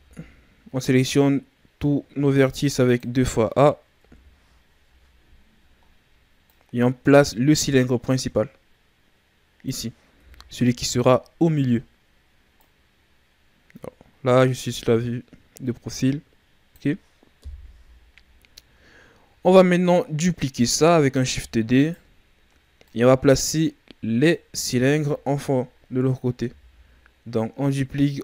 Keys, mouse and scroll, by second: 0.7 click, 3.9 KP_1, 5.3-5.8 ctrl+scroll down 1, 5.8-6.4 scroll up 1, 6.4 click, 10.2 KP_3, 12.5 click, 17.3 KP_1, 18.5-19.4 shift+scroll down 4, 19.4-19.7 scroll up 1, 21.2 shift+d, 22.8 click, 24.5 z, 25.8-26.4 scroll down 1, 26.4 s.